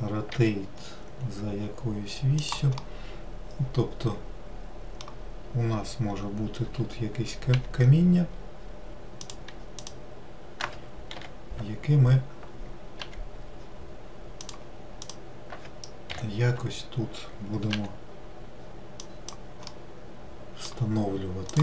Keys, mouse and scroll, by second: 0.7 r, 3.2-6.2 middle drag, 8.1 g, 10.2 click, 13.4 g, 15.4 click, 18.8 g, 20.1-21.6 middle drag.